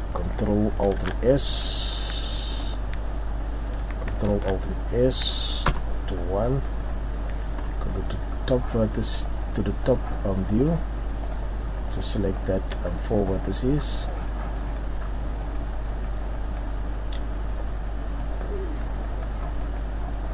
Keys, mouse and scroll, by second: 0.0 scroll up 1, 1.0 alt+shift+s, 2.7 click, 4.2 alt+shift+s, 6.7 click, 6.7-7.6 scroll down 2, 7.6-8.0 scroll down 2, 7.6 KP_7, 8.3 scroll up 2, 9.1 right click, 9.8 shift+right click, 11.2 shift+right click, 11.2-11.8 shift+scroll up 1, 11.9 shift+right click, 12.9-13.7 scroll down 3, 13.7 middle click, 13.7-14.0 scroll up 3, 14.0 middle click, 14.3 scroll down 1, 14.6 middle click, 15.0 scroll up 1, 15.2 scroll down 1, 16.1 middle click, 16.3 scroll up 1, 17.0-17.4 scroll up 1, 17.4-18.0 scroll down 2, 18.2 middle click, 19.1 middle click, 19.6-20.3 scroll up 1.